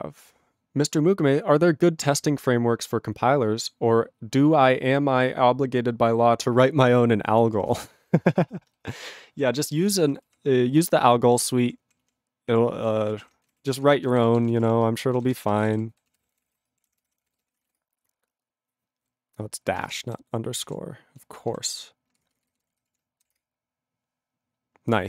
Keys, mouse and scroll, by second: 7.3 ctrl+p, 7.4 ctrl+p, 7.7 ctrl+space, 7.7 ctrl+n, 7.9 ctrl+e, 8.0 ctrl+n, 8.1 ctrl+g.